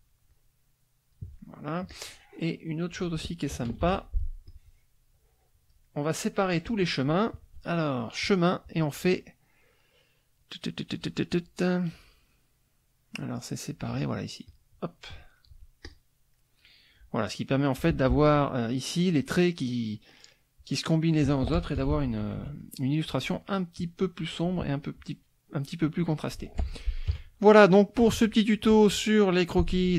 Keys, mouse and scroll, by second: 0.3-1.3 drag, 1.3 middle click, 1.9-3.3 drag, 3.8 ctrl+d, 4.4-6.3 drag, 8.2 click, 14.4 click, 15.4 click, 15.8 click, 16.4 click, 18.1 z, 18.3 click, 21.6 F1, 21.8 KP_Subtract, 23.1 middle click, 26.1 middle click, 26.6 F1, 27.1 KP_Subtract, 28.7 middle click.